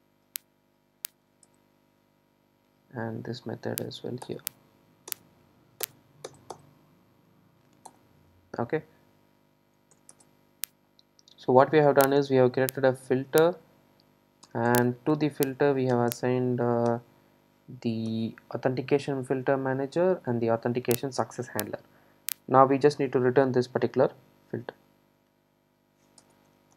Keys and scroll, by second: 7.9 super+e, 18.4 alt+super+l.